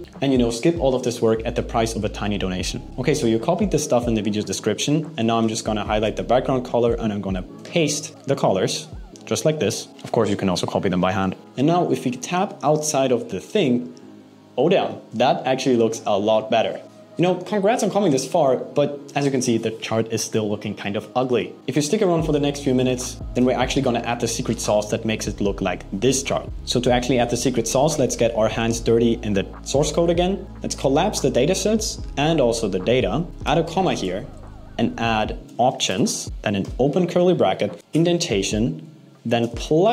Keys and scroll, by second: 7.2 super+v, 36.2 shift+space, 36.3 alt+8, 37.8 Up.